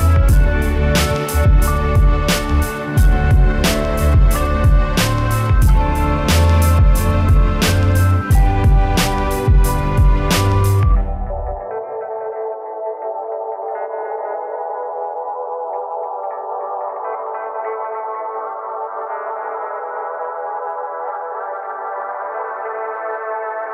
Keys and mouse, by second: 0.5 right click, 0.6 s, 0.9 click, 1.0 s, 1.6 middle click, 1.9 right click, 2.1 s, 2.4 click, 2.5 KP_1, 2.7 s, 3.0 click, 4.1 right click, 4.3-11.2 typing, 4.5 click, 5.0 right click, 5.5 click, 6.4 click, 7.1 click, 7.4 right click, 7.6 click, 7.7 click, 8.2 click, 8.2 right click, 9.4 click, 9.8 click, 10.4 click, 10.9 click, 11.8 middle click, 12.2 click, 12.8 right click, 12.9 s, 13.4 click, 13.5 right click, 13.9 f, 14.0-15.3 right drag, 15.3 KP_1, 15.7 a, 15.8 z, 15.9 b, 16.8-18.0 drag, 18.0 a, 18.1 b, 18.3-18.7 drag, 19.0 a, 19.1 z, 19.3 Tab, 20.0-21.6 drag, 21.0 right click, 21.6 right click, 21.8 s, 22.8-23.7 drag.